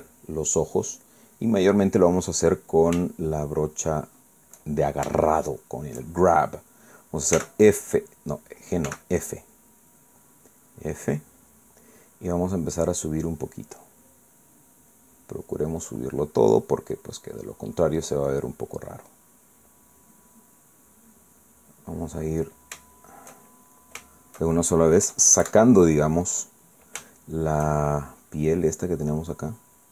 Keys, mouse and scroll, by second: 0.8 click, 2.0 click, 4.4-5.6 shift+middle drag, 6.2-7.0 shift+middle drag, 8.4 g, 9.9 f, 12.0 click, 15.4-17.2 drag, 17.7 click, 19.4-20.7 drag, 21.2 click, 22.4 middle click, 23.8-24.9 shift+middle drag, 25.1 shift+middle click, 26.1 KP_Add, 28.0 shift+middle click.